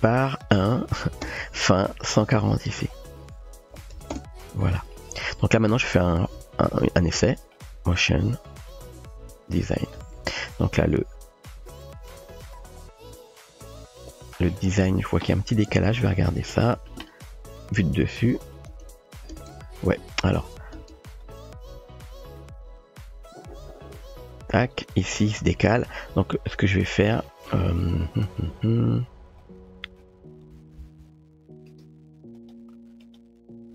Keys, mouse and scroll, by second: 0.3-1.6 drag, 2.8-4.7 drag, 6.4 space, 10.0 space, 10.7-13.7 drag, 15.7 KP_7, 17.6 KP_7, 18.7 space, 19.3 space, 20.4 space, 20.8 space, 21.3-24.8 drag, 30.6 g, 33.0 click.